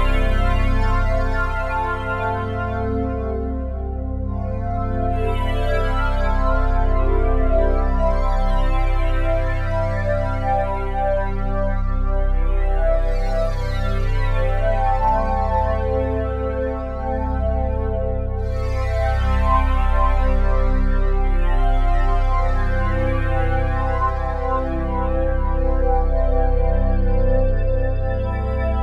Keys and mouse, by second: 0.5 shift+click, 2.1 click, 3.2-3.5 typing, 5.5 Page_Down, 5.6 Page_Down, 5.9 Page_Down, 6.1 Page_Down, 6.2 Page_Down, 6.3 Page_Down, 6.5 Page_Down, 6.7 Page_Down, 6.9 Page_Down, 8.4-9.6 drag, 9.8-15.3 alt+shift+drag, 15.9 click, 18.1 click, 19.4 click, 21.3 shift+click, 22.2 g, 22.5 y, 24.1 Escape, 25.2-27.2 shift+drag, 27.2 typing, 27.4-28.5 ctrl+alt+drag.